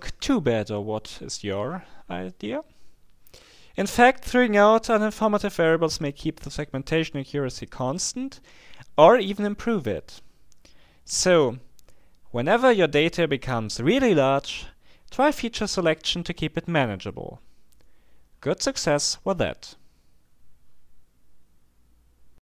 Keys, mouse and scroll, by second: 0.5-1.2 scroll up 1, 2.1-2.7 scroll up 1, 5.0-5.6 scroll up 1, 10.3-10.9 scroll up 2, 16.3-16.9 scroll up 2, 17.5-18.1 scroll up 2, 18.4-19.1 scroll up 2.